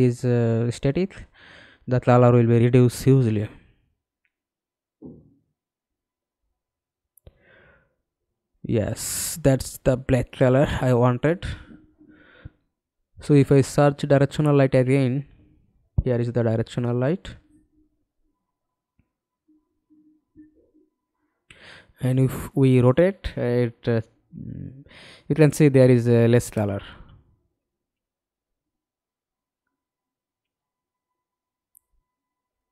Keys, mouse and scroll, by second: 10.8-11.3 scroll down 2, 11.7-13.3 scroll down 3, 13.3-14.5 typing, 17.5-18.5 scroll up 4, 18.5 scroll up 1, 18.5-21.9 scroll down 1, 21.9-24.1 scroll down 2, 24.4-25.4 scroll up 5, 25.4 scroll up 1, 25.4 middle click, 26.1 ctrl+z, 26.9 middle click, 29.3 f.